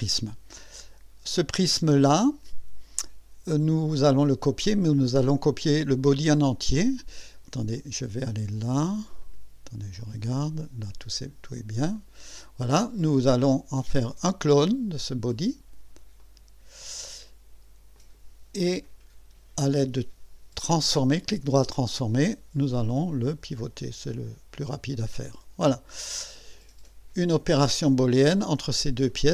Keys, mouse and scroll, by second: 7.7 click, 9.2 click, 10.0 click, 10.8 click, 11.9 click, 16.2 click, 17.9 click, 18.8 right click, 21.2 click, 23.0-24.6 drag, 25.2 click, 29.1 click.